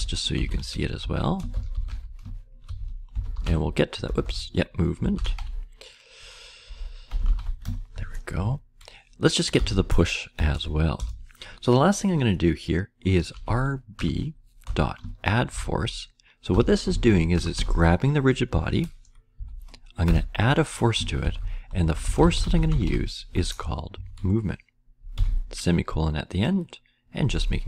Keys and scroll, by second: 0.0-7.8 typing, 8.3 Right, 9.2-10.0 typing, 10.3 Return, 10.9 Return, 12.2-17.3 typing, 19.3 Down, 20.0 Return, 20.9-23.3 typing, 23.9 Right, 24.9-25.6 typing.